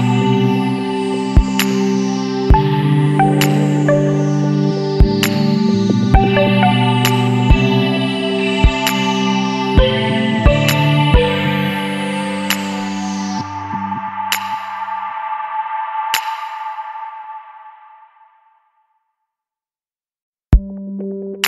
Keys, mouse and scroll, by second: 0.9 click, 1.8 e, 3.5 click, 4.7 click, 5.6 e, 6.9 click, 8.6 click, 9.5 e, 10.8 click, 12.3 click, 13.9 click, 17.2 click, 19.9 l.